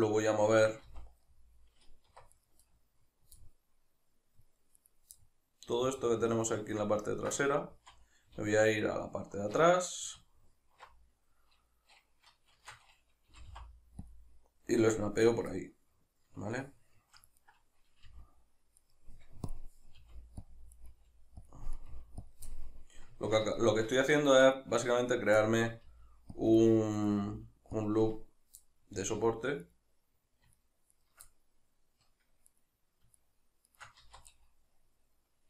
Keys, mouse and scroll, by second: 0.9 z, 2.1 1, 2.4 right click, 2.7 middle click, 4.8 right drag, 5.2 middle click, 7.1 ctrl+right drag, 7.4-14.1 middle drag, 7.7 z, 8.3 alt+q, 12.5 shift+Tab, 13.3 g, 14.1 click, 15.6-17.4 middle drag, 17.4 right click, 18.1 g, 19.0 right click, 19.5-20.0 drag, 20.0 g, 20.6 click, 20.8 right click, 20.9 g, 21.5 click, 21.8 right click, 21.9 g, 22.3 click, 22.5-24.4 middle drag, 24.4 right click, 25.1 right click, 25.4-26.4 middle drag, 25.9 g, 26.4 click, 27.0 right click, 27.2 g, 27.8 click, 28.6-29.6 middle drag, 29.0 z, 29.6 right click, 30.6 shift+right click, 31.0 shift+right click, 31.3-32.5 middle drag, 32.5 right click, 33.2 shift+right click, 33.7 shift+right click, 34.0 z, 34.4-35.4 middle drag.